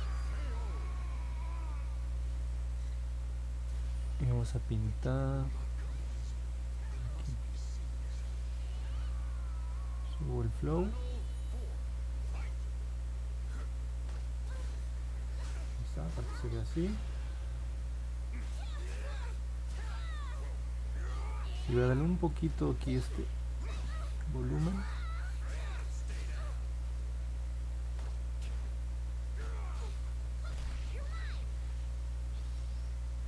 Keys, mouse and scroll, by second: 10.0 click, 23.0 click, 24.0 ctrl+z, 24.8 click, 25.6 ctrl+z, 26.2 click, 27.5 click, 28.3 click, 29.3 click, 30.2 ctrl+z, 30.9 click, 32.4 ctrl+z, 33.0 ctrl+z.